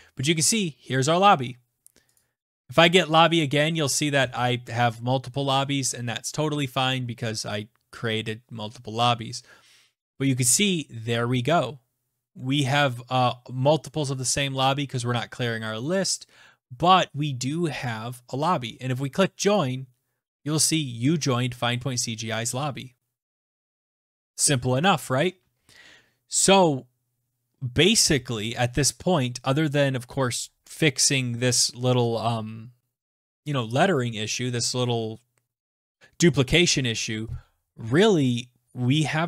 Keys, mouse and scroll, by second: 19.0 click, 23.1 click.